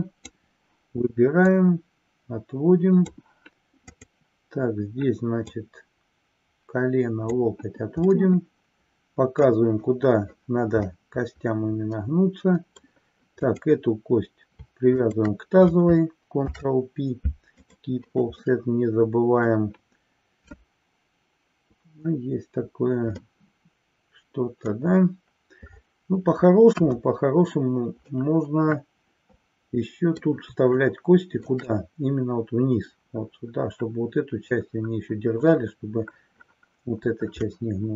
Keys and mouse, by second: 1.5-3.1 drag, 3.8 click, 5.3-7.5 drag, 8.1-9.6 middle drag, 10.9-12.8 middle drag, 13.6 click, 15.1 shift+click, 16.6 ctrl+p, 18.5-19.6 middle drag, 23.2-24.7 middle drag, 26.7 KP_1, 28.1-30.2 middle drag, 30.8 shift+middle click, 37.5-37.9 middle drag.